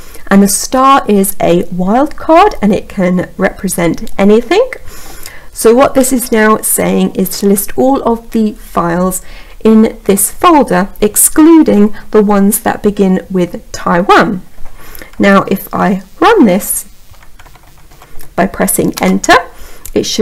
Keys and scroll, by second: 18.2 Return.